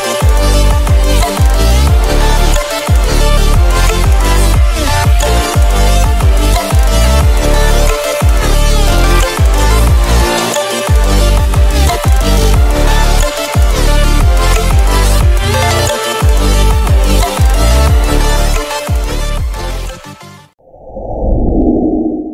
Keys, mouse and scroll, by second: 0.5-1.1 click, 2.9-3.8 drag, 5.0-5.5 drag, 8.8-9.5 drag, 10.9-11.7 drag, 12.3 v, 12.5-13.9 drag.